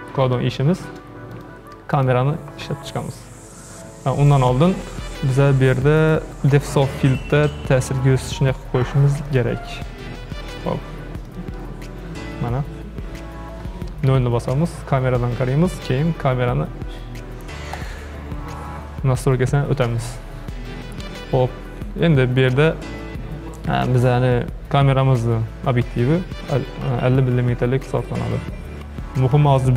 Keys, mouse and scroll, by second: 0.4-1.3 shift+middle drag, 1.3 click, 2.0 click, 4.3 click, 6.0-9.1 drag, 10.4-11.3 middle drag, 11.3 click, 14.0 KP_0, 17.7 click, 28.1 click.